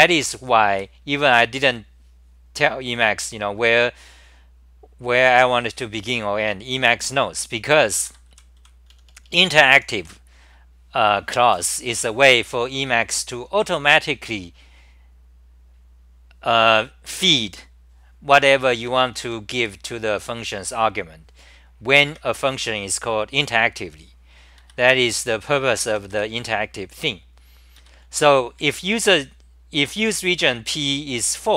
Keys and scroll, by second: 0.7 w, 1.5 g, 8.0 ctrl+g, 8.1-10.5 typing, 18.8-20.1 typing, 22.0 9, 24.6 ctrl+g, 24.6-26.6 typing, 27.8 ctrl+g, 28.0 t, 28.6 9.